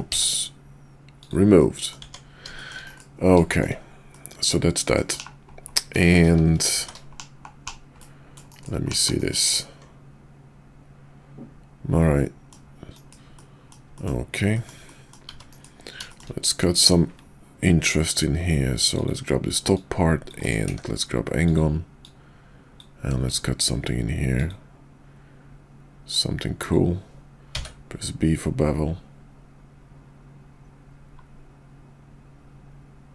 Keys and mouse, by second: 0.1 x, 1.6 middle click, 2.0 Tab, 2.6 shift+middle click, 2.9 KP_5, 4.1-5.0 middle drag, 5.2 /, 6.7 shift+2, 7.1 /, 8.0 middle click, 8.5 KP_5, 8.8 /, 9.2 KP_5, 9.6-12.5 middle drag, 12.9 KP_5, 13.3 middle click, 14.0 middle click, 14.5 middle click, 14.9 middle click, 15.3 `, 15.5 KP_5, 16.0 shift+middle drag, 18.8 click, 19.6-20.5 drag, 20.7 d, 22.0-22.8 drag.